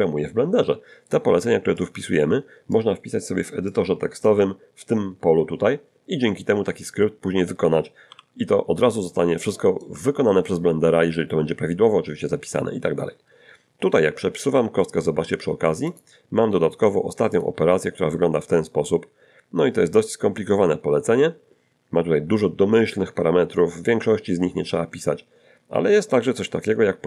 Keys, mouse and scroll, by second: 1.8-2.9 drag, 3.7 click, 8.1 n, 9.1 shift+middle click, 14.5 g, 15.9 click, 17.3 click.